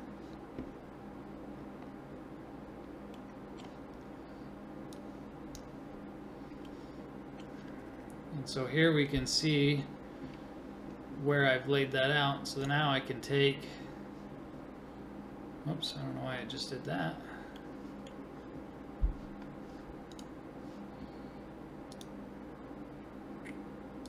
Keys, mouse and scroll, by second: 0.9-2.4 drag, 2.4-5.0 middle drag, 5.0-6.7 drag, 6.7-12.6 middle drag, 12.6-24.0 right drag, 16.6-21.9 middle drag, 17.0-20.1 drag, 21.9-24.0 drag.